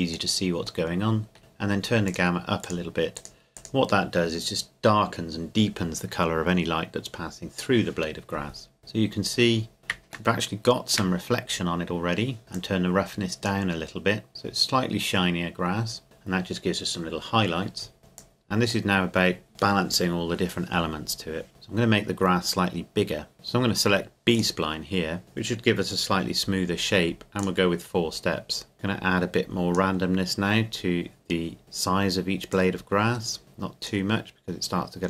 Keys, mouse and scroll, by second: 0.9 middle click, 1.4-2.1 scroll up 2, 2.1-5.8 drag, 8.8-9.9 scroll up 2, 10.3-11.5 shift+middle drag, 11.5-12.4 scroll up 2, 12.4 middle click, 12.5-14.5 drag, 16.0-16.5 scroll down 1, 18.2 click, 18.8-19.9 drag, 21.7-23.3 scroll down 1, 23.3 KP_0, 24.3 click, 27.4 click, 32.5 click.